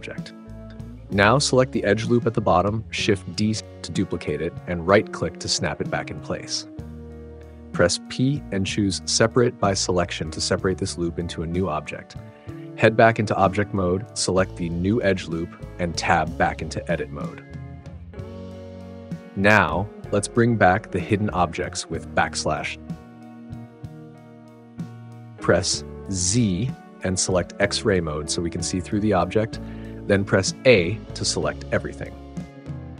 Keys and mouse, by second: 2.8 shift+d, 4.2-5.9 drag, 7.3 p, 12.8 Tab, 17.0 Tab, 21.9 /, 27.1 alt+z, 30.5 a.